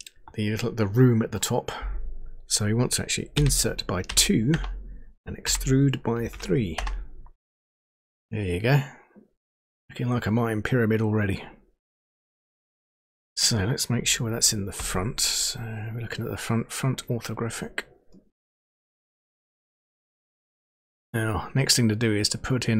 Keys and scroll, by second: 3.8 i, 4.1 2, 4.5 Return, 5.4 e, 6.7 Return, 14.8 End.